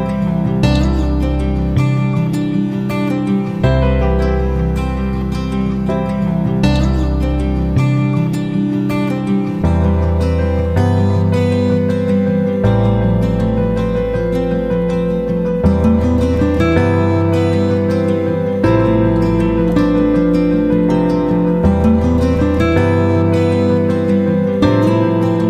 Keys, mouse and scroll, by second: 3.2 click, 11.0 F9, 12.3 click, 13.8 Delete, 14.8 click, 20.1-25.4 drag.